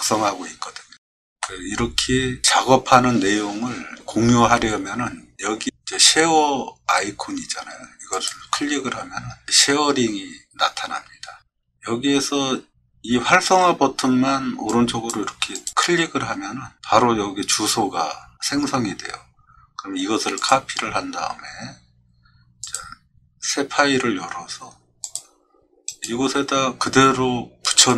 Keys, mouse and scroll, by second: 1.4-2.4 middle drag, 8.1 click, 14.7-15.1 drag, 15.5 click, 20.4 click, 22.6 click, 25.0 click, 25.9 right click, 27.9 click.